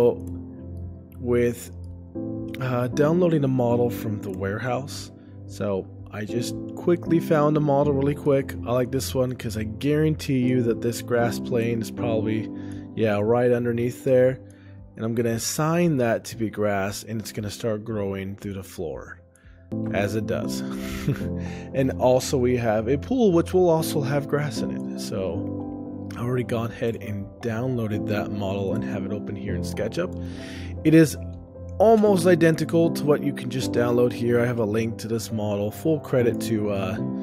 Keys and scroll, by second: 0.8 shift+space, 2.2 ctrl+alt+o, 27.1 ctrl+alt+o.